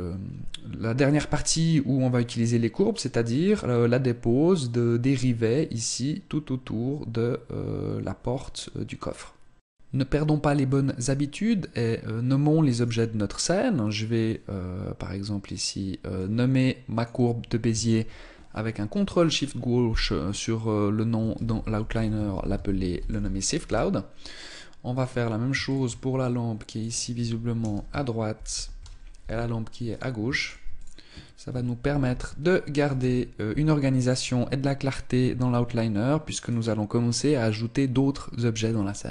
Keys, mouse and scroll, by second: 12.6 right click, 16.0 click, 18.1 ctrl+click, 24.7 click, 25.4 ctrl+click, 29.7 click, 30.2 ctrl+click, 36.2 right click.